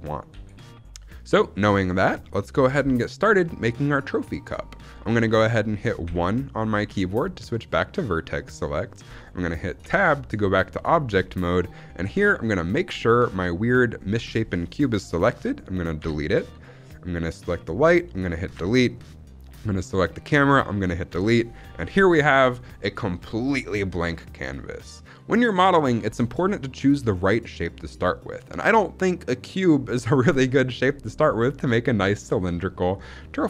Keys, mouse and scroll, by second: 0.2 s, 1.1 click, 1.5-2.0 scroll down 2, 2.1 shift+middle click, 9.7 Tab, 10.2-11.0 scroll down 3, 10.7 middle drag, 11.0-11.4 scroll up 2, 11.4 middle click, 12.0-13.4 scroll up 1, 15.9 Delete, 17.5 click, 18.5 Delete, 19.5 click, 21.0 Delete.